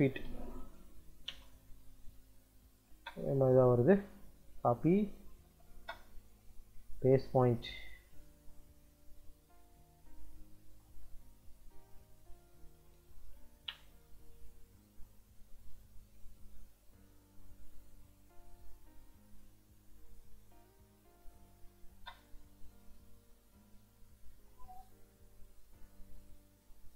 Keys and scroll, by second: 0.0-0.6 typing, 1.2 Return, 2.7 space, 5.0 c, 5.6 space, 12.4-13.7 typing, 15.8 Escape, 21.2 d, 21.6 i, 21.8 space.